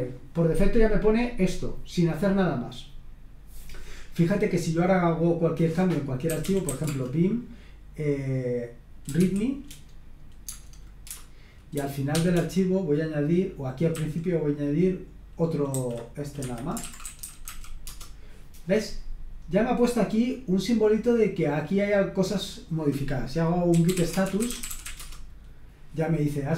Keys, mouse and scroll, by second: 6.0-7.1 typing, 9.2 typing, 10.5 Tab, 11.1 Return, 12.1 shift+4, 13.9 a, 15.7-18.0 typing, 16.4 Escape, 20.0-21.2 drag, 21.6 click, 22.6 click, 23.5-25.3 typing.